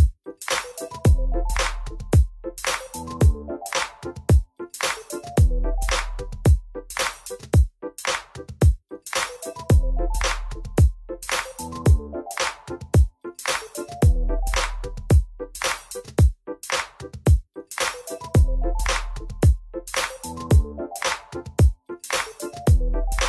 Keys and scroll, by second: 2.2 1, 5.3 e, 6.3 e, 16.3 w, 17.1 1.